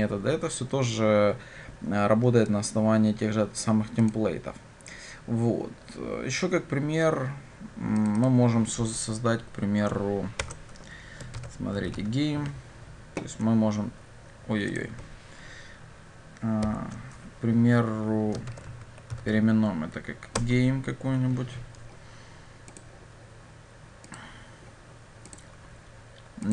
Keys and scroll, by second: 10.5 shift+F6, 13.3 Escape, 16.8 shift+F6.